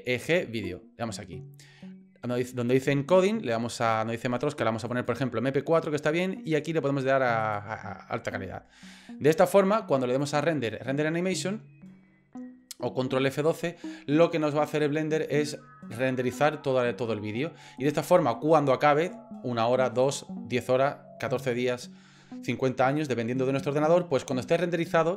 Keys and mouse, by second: 2.8 click, 3.8-5.2 drag, 6.7 click, 10.2-25.1 drag.